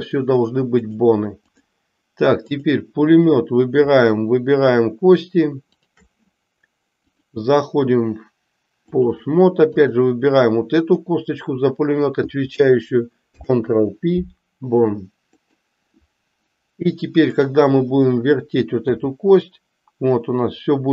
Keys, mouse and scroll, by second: 1.0 click, 2.6 click, 5.6 shift+click, 7.0-9.1 drag, 9.7 click, 13.2 ctrl+p, 17.2 click, 18.8 r.